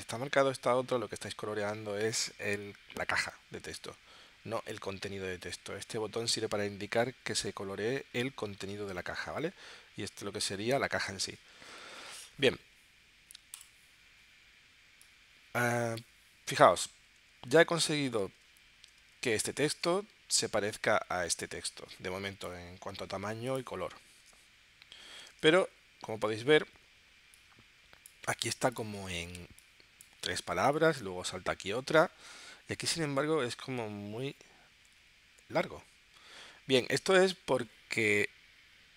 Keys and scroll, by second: 25.3 super+Tab, 32.3 super+Tab.